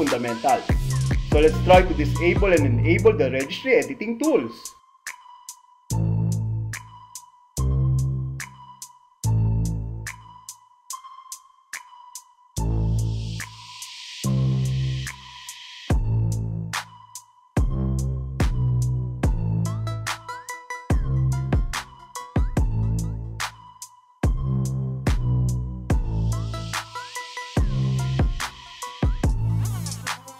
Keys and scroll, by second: 5.1 super+r, 8.4 Return, 11.6 Left, 12.9 space, 15.9 alt+F4, 17.9 p, 20.5 Return, 21.9 alt+e, 24.2 alt+a, 26.1 super+r, 28.4 Return, 30.2 Left.